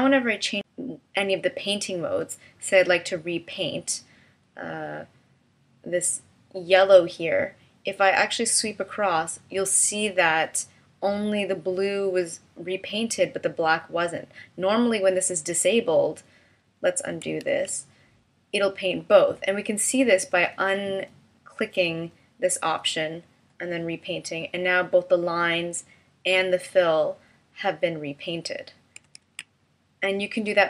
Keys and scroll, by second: 17.5 super+z, 29.2 super+z.